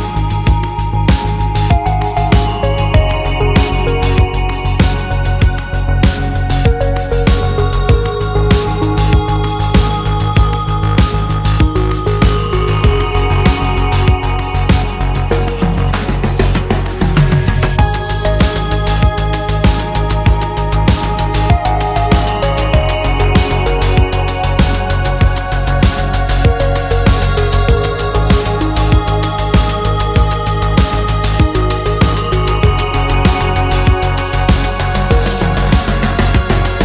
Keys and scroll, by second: 3.7 b, 5.0 space, 6.7 space, 7.9 space, 10.1 space, 12.3 ctrl+g, 14.9 space, 16.8 space, 18.2 x, 18.5 ctrl+z, 20.0 space, 23.1 ctrl+d, 24.4 ctrl+t, 30.0 Left, 30.1 Return, 30.9 F2, 32.3 ctrl+j.